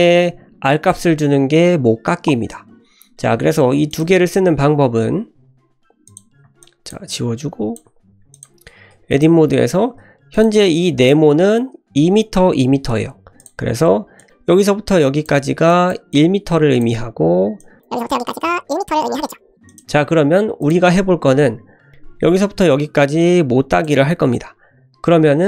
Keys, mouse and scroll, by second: 0.1 typing, 3.9 click, 6.0 click, 6.6 ctrl+click, 7.1 ctrl+click, 8.3 click, 8.7 Tab, 9.1 click, 9.7 Tab, 10.3 click, 10.6-11.0 drag, 13.4 click, 14.1-15.2 drag, 14.2 ctrl+z, 15.6 click, 16.1 click, 17.5 click, 17.9 click, 18.3 click, 18.9 click, 19.6 click, 20.6 click, 20.8 Tab, 22.3-23.8 drag, 24.8 ctrl+z.